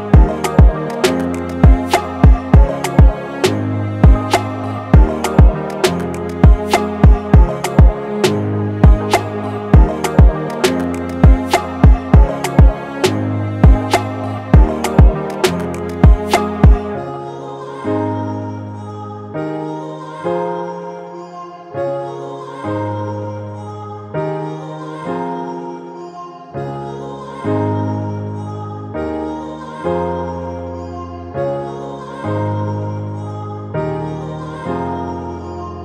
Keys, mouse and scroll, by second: 0.8 8, 1.8-2.4 click, 2.7 0, 3.8-4.4 click, 4.8 0, 6.8 click, 9.4 right click, 11.3 click, 13.7 click, 16.9 click, 20.8 click, 23.0 click, 27.6 click, 32.7 click, 35.6 click.